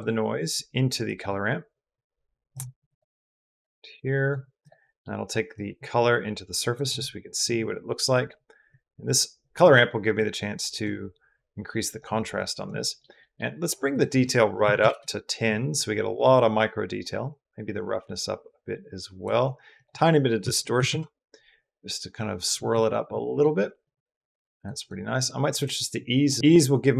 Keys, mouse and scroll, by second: 0.9 click, 1.6-2.7 drag, 3.5-4.1 drag, 4.4 click, 4.7 click, 5.3-6.6 drag, 8.5-9.4 drag, 10.0 click, 11.2-11.8 drag, 12.2 click, 12.6 middle click, 13.1 middle click, 13.8 click, 17.1-19.1 drag, 19.6-20.7 drag, 21.6-22.4 middle drag, 22.6 middle click, 23.4 middle click, 24.5 click, 25.0 click, 25.4-26.1 drag.